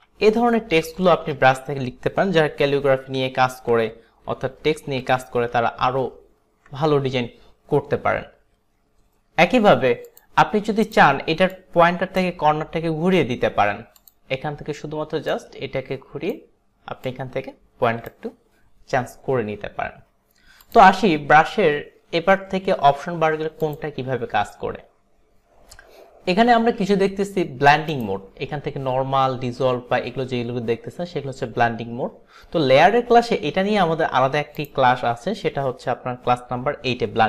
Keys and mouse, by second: 0.1 ctrl+z, 1.2 ctrl+alt+z, 2.6 ctrl+alt+z, 3.1 ctrl+alt+z, 4.1 ctrl+z, 5.1 ctrl+z, 5.6 ctrl+z, 6.1 ctrl+z, 10.2 click, 11.0 click, 11.6 click, 14.4 click, 15.4 click, 17.1 click, 20.7 click, 23.7 click, 28.0 click, 34.7 click.